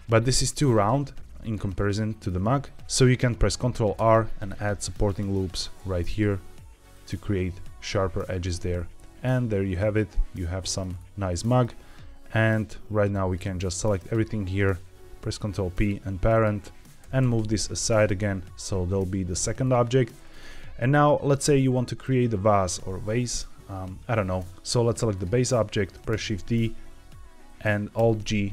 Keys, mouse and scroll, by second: 0.1 g, 0.6 click, 1.6 middle click, 2.7 ctrl+z, 3.9 ctrl+r, 5.4 click, 5.7 ctrl+r, 6.8 click, 7.4 Tab, 8.2 z, 8.7-10.7 middle drag, 10.8-11.2 scroll down 2, 11.3 middle drag, 13.0 drag, 14.0 shift+click, 15.1 ctrl+p, 16.2 click, 16.9 g, 17.1 x, 18.0 x, 18.0 c, 19.5 click, 21.7 middle drag, 24.5 click, 25.0 click, 26.0 shift+d, 26.4 right click, 27.9 alt+g.